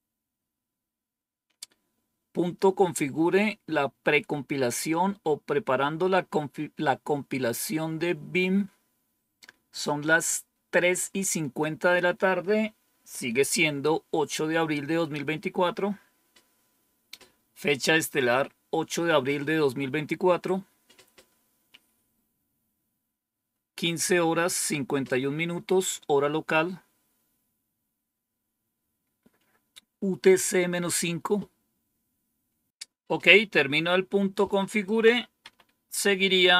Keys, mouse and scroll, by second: 34.6 click, 35.3 Up, 36.4 Down.